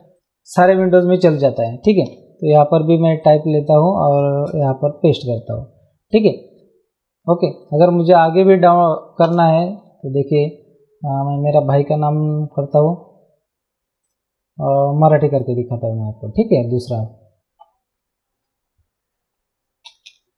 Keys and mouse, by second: 1.5 click, 2.1 t, 3.2 click, 4.4 ctrl+v, 6.1 click, 7.6 click, 9.2 Return, 14.0 click, 15.3 click, 16.8 click, 19.6-20.3 typing.